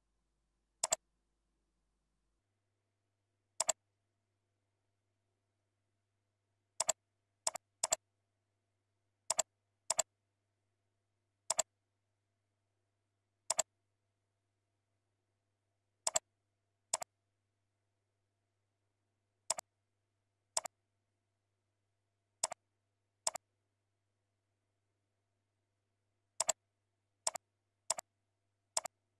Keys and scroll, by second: 5.6 ctrl+Left, 6.1 ctrl+Up.